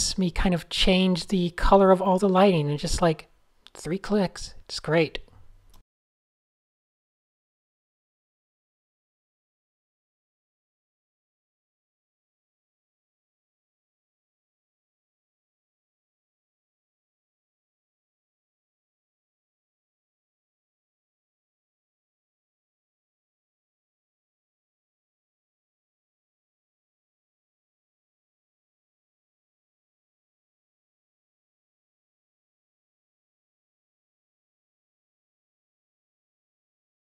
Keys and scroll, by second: 0.2 shift+super+{, 1.0 super+a, 1.0 super+7, 2.3 shift+super+a, 2.6 Tab, 2.8-4.0 typing, 5.8 shift+super+a, 6.0 n, 10.8 super+z, 13.4 d, 14.5 Tab, 14.8 super+z, 15.0 super+z, 16.8 Tab, 20.4 Tab, 29.2 a, 31.1 alt+super+a, 33.1 alt+super+a, 33.8 shift+super+a.